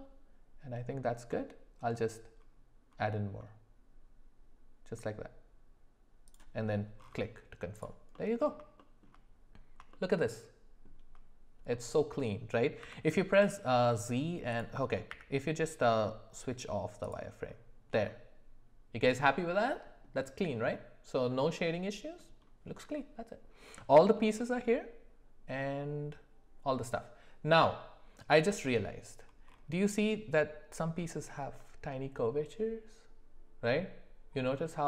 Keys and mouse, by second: 8.1 middle click, 8.8 shift+middle drag, 9.9-11.0 shift+middle drag, 11.7 middle click, 12.8 z, 15.1 q, 18.1-20.0 middle drag, 21.3 middle click, 24.1 middle click.